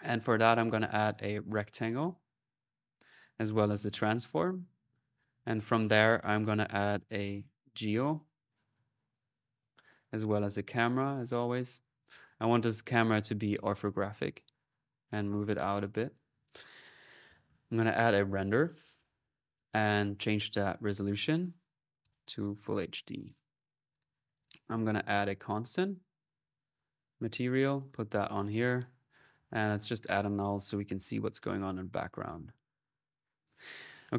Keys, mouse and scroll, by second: 0.0-0.8 typing, 0.9 click, 1.8 click, 2.4 middle click, 3.0 right click, 3.4-4.1 typing, 4.3-5.5 drag, 5.9 right click, 6.3-7.9 typing, 8.2 click, 8.9 click, 9.8 click, 10.1-10.8 typing, 10.9 click, 12.1 click, 12.9-14.8 drag, 15.0 click, 16.7 click, 16.8-17.6 typing, 17.8 click, 18.6 click, 19.7 click, 20.4 click, 21.8 click, 24.2 click, 24.6-25.4 typing, 25.6 click, 26.1 click, 26.8 click, 28.2-30.2 drag, 29.6 alt+n, 30.3 alt+click, 30.4 typing, 31.9 right click, 32.7 click, 32.9-34.0 drag.